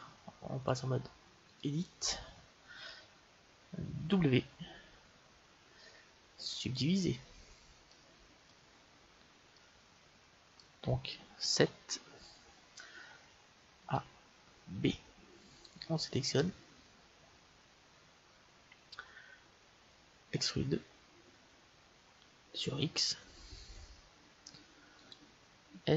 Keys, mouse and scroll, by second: 0.6-2.4 drag, 4.1 w, 7.8-11.4 middle drag, 11.5 KP_7, 13.7 a, 14.6 b, 16.9-20.2 middle drag, 20.2 e, 25.6 s.